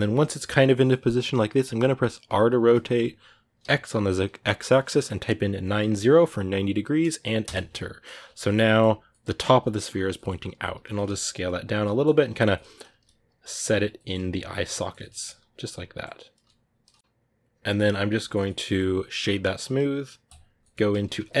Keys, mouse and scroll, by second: 8.0 scroll up 4, 8.2-9.6 shift+middle drag, 9.6-10.5 scroll down 1, 10.5-19.1 scroll down 1, 19.1-19.9 scroll down 1, 19.9-21.4 scroll down 1.